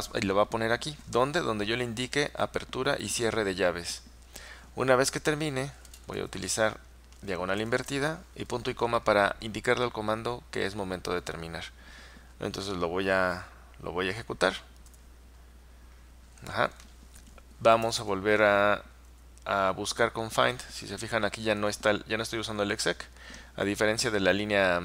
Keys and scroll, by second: 2.5-3.0 typing, 14.9 Return, 17.7-18.6 typing, 19.2 Up, 19.9 Up.